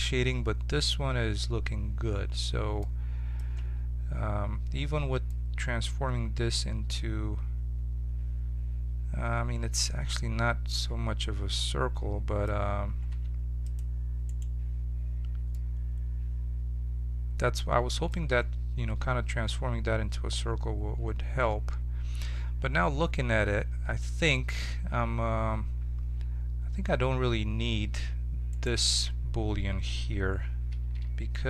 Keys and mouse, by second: 3.5 Tab, 13.1 ctrl+Tab, 14.2-16.3 right drag, 16.3-17.6 middle drag, 23.4 Tab, 24.7 Tab, 25.3 Tab, 27.0 Tab, 28.0 Tab, 30.9 z.